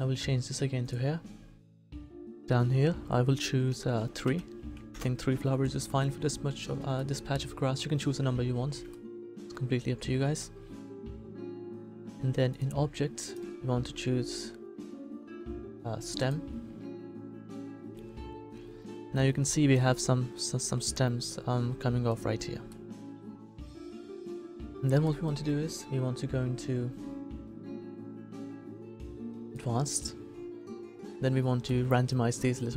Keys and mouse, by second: 1.6 middle click, 3.8-6.9 middle drag, 12.5-16.9 drag, 18.4 middle click, 29.5-31.3 middle drag.